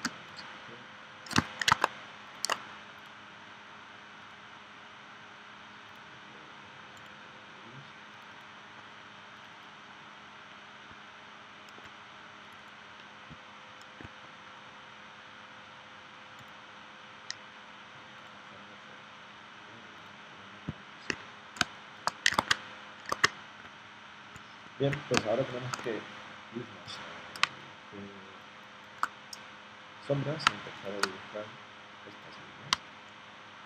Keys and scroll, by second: 21.6 space, 22.4 super+Tab, 23.1 super+Tab, 25.1 space, 27.4 space, 30.5 space, 32.7 space.